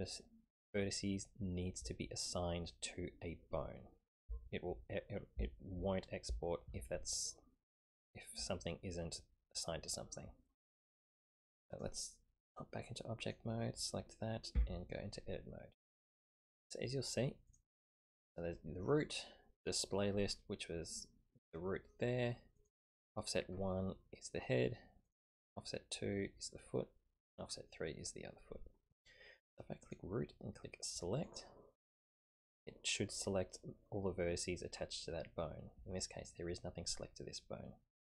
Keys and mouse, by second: 11.7-12.6 drag, 13.2 click, 14.5 Tab, 17.5 click, 19.6 click, 22.5 click, 25.0 click, 27.2 click, 29.8 click, 31.2 click.